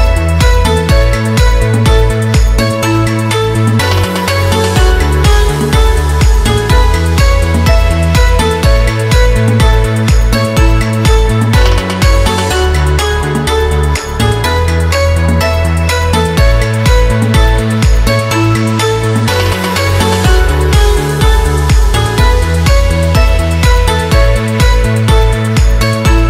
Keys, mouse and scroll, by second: 2.2 click, 13.9-15.4 drag, 15.7 alt+shift+click, 18.1-21.6 typing, 24.1 typing, 24.3 ctrl+a, 26.0-26.2 typing.